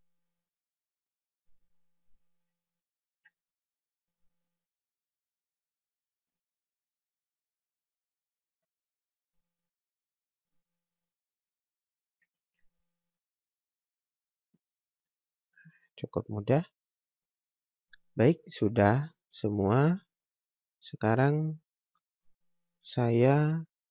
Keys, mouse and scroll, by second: 4.1 scroll down 1, 4.5 scroll up 1, 4.9 click, 12.7 click, 16.1 scroll down 1, 17.4 click, 18.5 scroll down 1, 18.7 scroll up 1, 19.3 scroll down 1, 19.5 scroll up 1, 20.5 right click, 21.4 click.